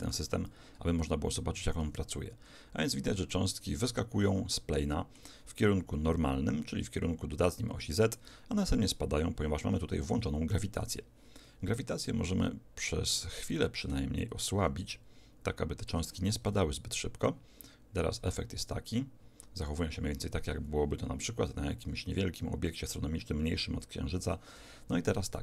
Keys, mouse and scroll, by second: 1.8 alt+a, 3.3-9.1 middle drag, 10.7 Escape, 13.5-16.1 drag, 16.5 alt+a, 24.2 Escape, 25.3-25.4 middle drag.